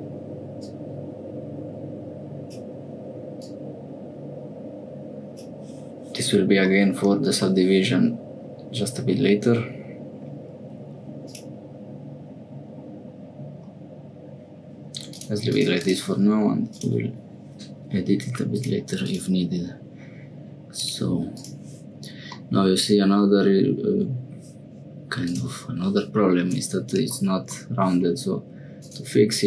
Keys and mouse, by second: 0.6-2.6 drag, 3.4-5.3 drag, 6.7 middle click, 11.2 click, 15.1 click, 15.5 click, 15.8-16.8 drag, 18.5 click, 19.0 click, 20.8 click, 21.3 click, 22.4-24.3 middle drag, 25.3 click, 28.9 click.